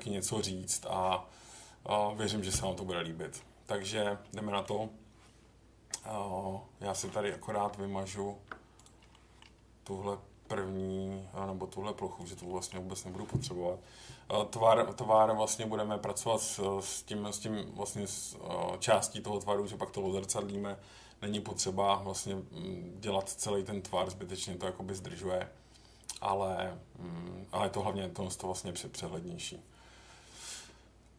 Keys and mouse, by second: 4.3 middle click, 7.0 middle click, 7.6 Tab, 8.7 click, 9.1 middle click, 10.4 Delete, 12.5 middle click, 15.2-16.8 middle drag, 20.2 middle click, 24.1 middle click.